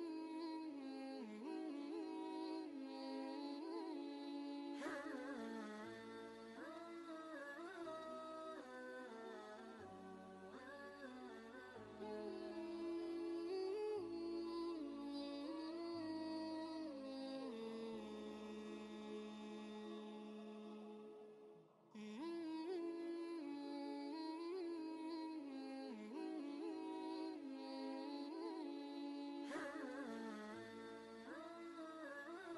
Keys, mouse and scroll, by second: 0.4 click, 10.2 click, 10.2 click, 12.9 ctrl+space, 13.1 ctrl+click, 13.5 ctrl+space, 14.5 click, 15.1 ctrl+space, 15.1 ctrl+click, 23.4 click, 23.4 click, 25.9 ctrl+space, 26.0 ctrl+click, 26.4-29.3 typing, 26.5 click, 27.1 ctrl+click, 27.9 click, 29.9 ctrl+space, 30.1 ctrl+click, 30.5 space, 30.6-32.5 drag.